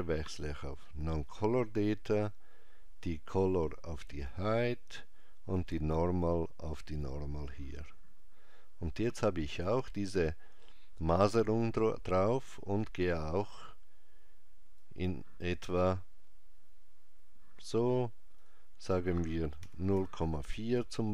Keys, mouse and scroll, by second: 3.1 click, 13.2 click, 18.4 click.